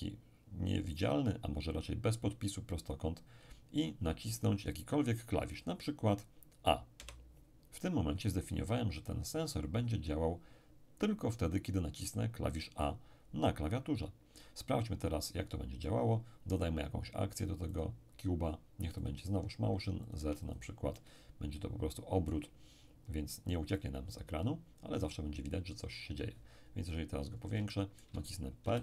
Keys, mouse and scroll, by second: 5.5 click, 7.0 a, 15.8-17.6 middle drag, 17.7 click, 19.0 click, 20.2-23.3 drag, 20.2 1, 20.9-23.3 middle drag, 23.5-26.0 drag, 26.8-27.7 scroll up 1, 27.7-28.8 shift+middle drag, 28.6 shift+p.